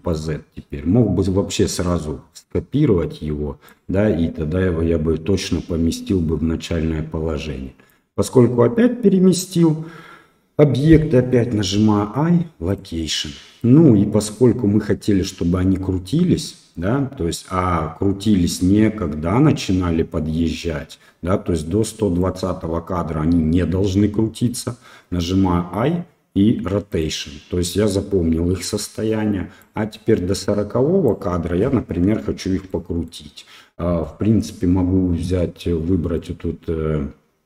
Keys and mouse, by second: 0.1-3.7 drag, 6.6-7.9 drag, 14.3-22.2 drag, 14.3 i, 29.6-31.1 drag, 32.8 shift+middle click, 36.3-37.4 drag.